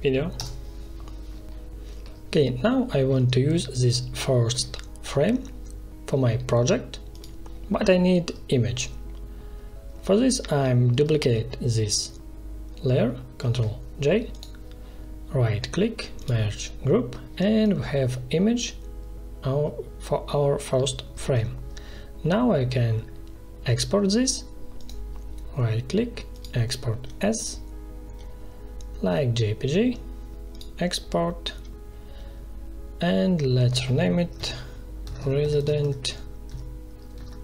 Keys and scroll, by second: 0.3 Return, 13.3 ctrl+j, 21.1 ctrl+z, 34.3-37.4 typing.